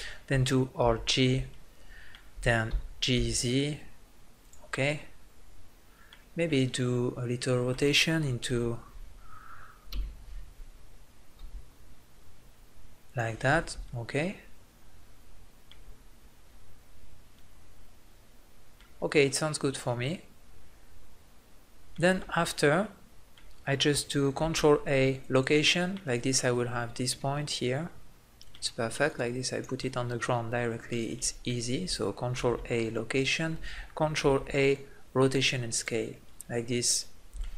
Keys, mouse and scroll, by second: 0.8 alt+g, 1.5 middle click, 2.6 g, 4.5-6.2 drag, 8.5 KP_3, 9.9 KP_5, 11.4 r, 13.2-14.8 drag, 20.0-21.2 middle drag, 22.2-24.3 middle drag, 24.3 ctrl+a, 29.1 click, 29.8 middle click, 32.3 ctrl+a, 34.2 ctrl+a.